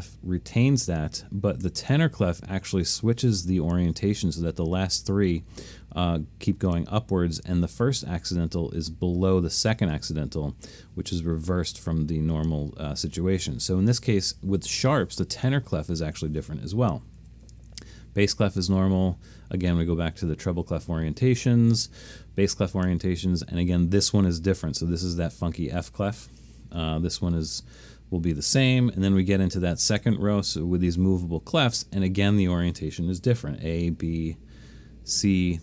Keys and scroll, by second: 1.7 3, 17.2 4, 18.3 5, 19.7-21.5 typing, 22.7 8, 24.0-24.7 typing, 26.5 9, 30.1 a, 34.0 b, 35.2 c.